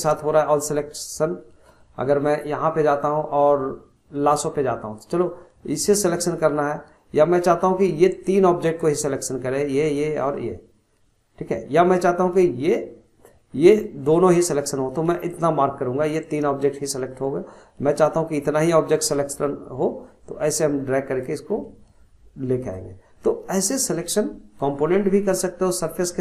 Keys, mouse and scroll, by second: 0.1-0.5 middle drag, 0.5-0.8 scroll up 1, 0.8-2.4 middle drag, 2.4-5.3 drag, 8.3 click, 13.9 click, 18.0 drag, 25.3-26.2 scroll up 9.